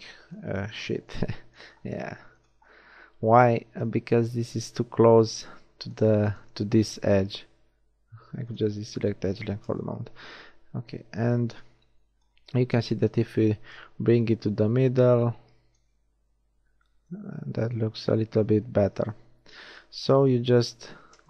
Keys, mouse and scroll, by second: 3.3 Tab, 7.3-8.5 drag, 9.7 n, 10.8 z, 11.2 a, 11.5 b, 12.5 z, 16.2 Tab, 18.0 Tab, 19.6 ctrl+z, 20.6 ctrl+z, 21.0 a.